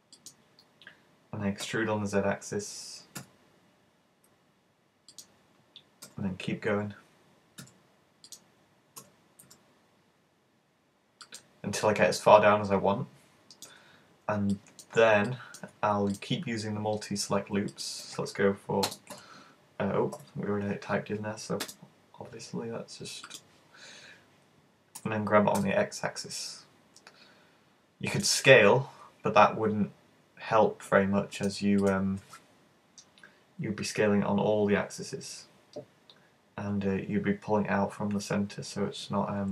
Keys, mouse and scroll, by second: 0.3 click, 1.7 e, 5.3 click, 6.1 e, 8.3 click, 9.1 e, 11.5 click, 11.9 middle click, 14.0-14.5 scroll up 2, 14.5 shift+middle click, 15.5 middle click, 16.3 right click, 16.5 right click, 17.7 shift+right click, 18.9 space, 21.7 space, 25.1 g, 28.2 click, 31.4 right click, 31.8 shift+right click.